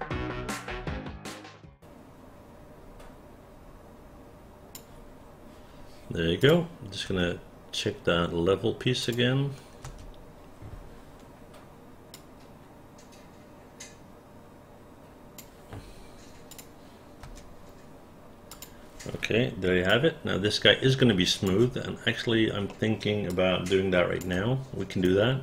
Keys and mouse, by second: 2.6-4.8 drag, 6.5 click, 7.1 space, 9.1 click, 9.9 space, 12.2-15.4 drag, 16.5 click, 17.3 space, 18.6 click, 20.0-21.5 alt+drag, 22.7 alt+middle click, 23.4 alt+click, 25.1 right click.